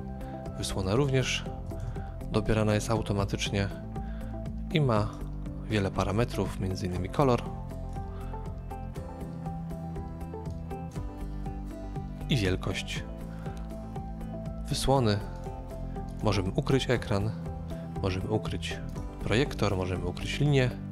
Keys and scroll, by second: 1.4-2.2 typing.